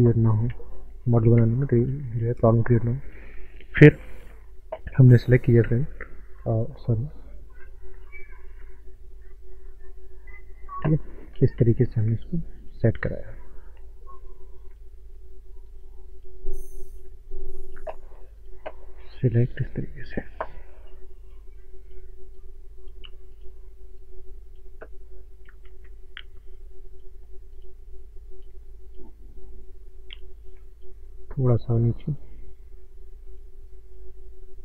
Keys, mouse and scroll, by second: 0.5 ctrl+space, 1.4 Tab, 2.5 click, 3.4 Tab, 4.8 Caps_Lock, 5.9 shift+middle click, 7.5 click, 8.1 shift+middle click, 9.3 click, 12.9 shift+middle click, 13.5 click, 17.4 shift+middle click, 18.4 click, 25.7 ctrl+z, 26.4 click.